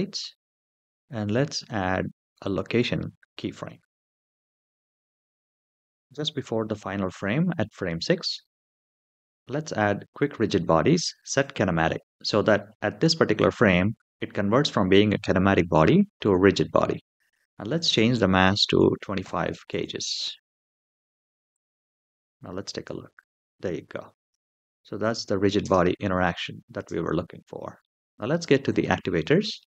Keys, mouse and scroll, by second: 1.0 i, 11.2 click, 17.5-19.5 drag, 21.3 click, 22.6 space, 24.0 space, 24.8 click, 25.4 space, 26.5 space, 27.2-27.6 middle drag, 28.5 click.